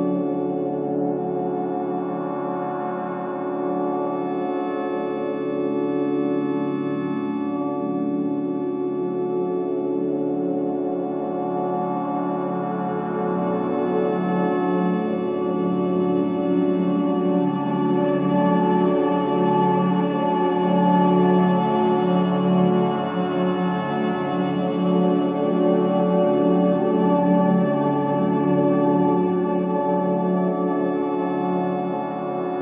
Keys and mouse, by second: 2.3 click, 3.1 click, 3.5-6.5 drag, 7.2-10.3 drag, 11.3-14.3 drag, 14.9-18.9 drag, 19.0 shift+a, 20.8 s, 24.8 click, 26.0 g, 29.9 click.